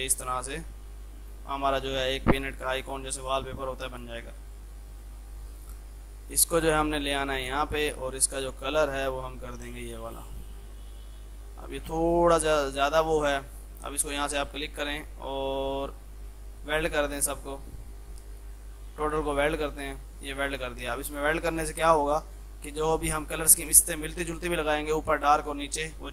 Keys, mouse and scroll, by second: 0.3 F3, 0.6 click, 1.6 ctrl+g, 2.5-4.3 shift+drag, 4.3 shift+F2, 5.8-9.1 shift+drag, 11.2 F2, 11.5-14.1 drag, 14.1 click, 16.7 click, 20.1-26.1 drag.